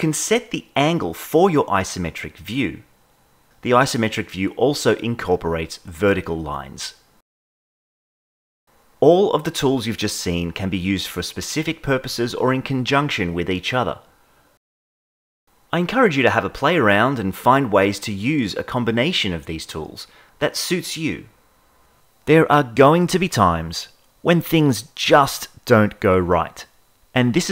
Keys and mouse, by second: 0.0 click, 1.1 click, 2.7 click, 3.6 click, 5.3 click, 6.2 ctrl+z, 7.5 click, 9.2-12.1 drag, 12.7-13.8 drag, 13.9 click, 14.4 click, 15.0 click, 15.4 click, 15.7 click, 16.1 click, 16.4 click, 16.7 click, 17.2 click, 17.6 click, 18.0 click, 18.4 click, 18.8 click, 19.1 shift+middle click, 22.5 click, 24.3 click, 25.7 click, 26.9 ctrl+z, 27.1 click.